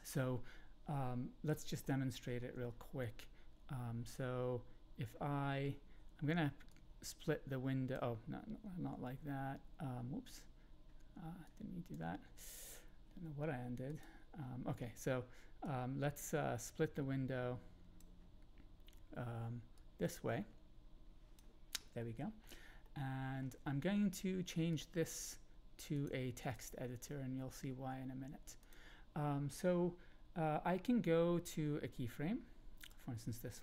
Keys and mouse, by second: 1.8 shift+middle click, 6.7-7.9 drag, 8.9 ctrl+z, 11.4-13.1 drag, 13.9 click, 15.6-18.0 drag, 19.8-21.4 drag, 22.0-22.4 ctrl+middle drag, 22.8 shift+middle click, 24.8-25.8 drag, 25.9 click, 26.4-28.7 drag, 31.5 click.